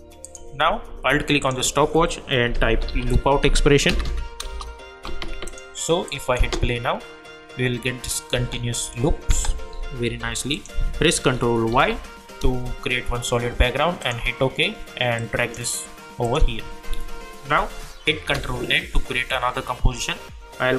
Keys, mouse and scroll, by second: 1.4 alt+click, 2.3-3.5 typing, 3.9 Down, 4.4 shift+Return, 5.4 click, 6.4 space, 8.3 space, 10.1 u, 10.5 click, 11.7 ctrl+y, 14.0 click, 18.2 ctrl+n.